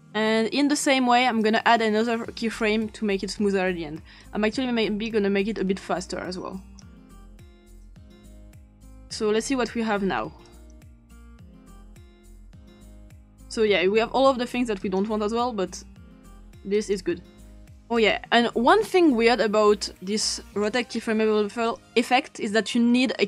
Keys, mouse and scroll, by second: 0.0 click, 1.4 click, 2.4 click, 4.2 click, 7.6 click, 10.4 click, 13.3 click, 14.8 click, 16.8 click, 18.0 click, 18.5 click, 20.6-21.8 drag.